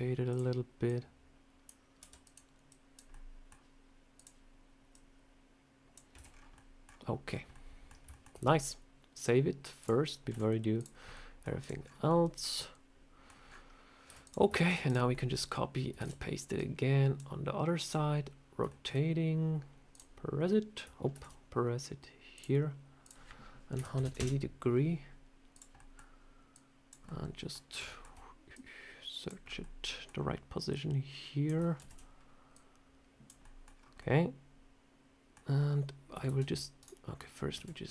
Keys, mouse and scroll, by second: 0.2 click, 0.7 click, 1.9 r, 2.6 click, 3.0 middle click, 4.0 click, 4.8 click, 6.0 Tab, 6.2 scroll down 4, 6.4 middle click, 6.8-7.2 scroll down 2, 7.4 middle click, 8.0 shift+middle click, 9.0 click, 10.2 z, 11.0 middle click, 11.5 click, 11.7 scroll down 4, 12.0 middle click, 13.3 scroll up 4, 14.0 z, 14.4 shift+middle click, 14.7 click, 15.0 middle click, 15.9 shift+d, 16.4 click, 17.7 click, 18.6 shift+middle click, 19.8 click, 21.0 ctrl+z, 22.2 click, 22.9 click, 25.4 click, 25.6 middle click, 26.4 click, 26.9 middle click, 27.5 scroll down 3, 27.8 shift+middle click, 28.4 click, 29.3 scroll up 4, 29.5 middle click, 30.0 scroll down 1, 30.6 click, 31.7 ctrl+z, 32.4 click, 33.3 middle click, 33.6 scroll down 2, 33.9 middle click, 35.4 scroll up 1, 36.2 shift+d, 37.4 ctrl+z.